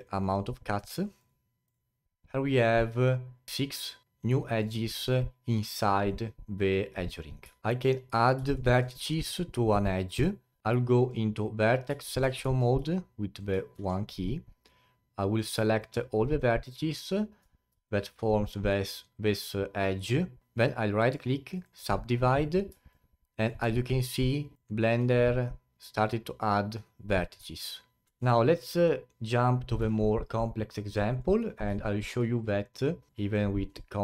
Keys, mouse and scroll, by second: 0.3-3.8 drag, 4.0-6.0 alt+drag, 7.6 alt+click, 8.5 alt+middle click, 9.0-10.6 scroll up 3, 10.6 scroll down 1, 10.8-12.0 alt+drag, 12.0 alt+middle click, 12.4 1, 12.9 alt+click, 13.7 1, 15.2 click, 15.8 shift+click, 16.2 shift+click, 17.0 shift+click, 17.8-20.4 alt+drag, 21.0 right click, 22.9-27.5 alt+drag, 28.0 Tab, 29.8 Delete, 31.1 click, 31.8-32.3 alt+middle drag, 32.3 click, 33.1 click.